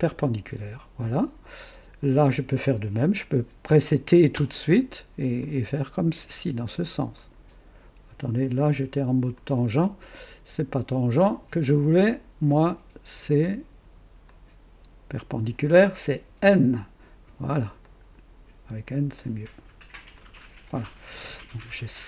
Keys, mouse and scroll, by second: 4.3 t, 5.3 click, 7.1 click, 9.3 click, 10.1 click, 12.4 right click, 14.2-15.6 drag, 16.2 typing, 17.8 click, 18.8 click, 20.1 click, 21.2 right click.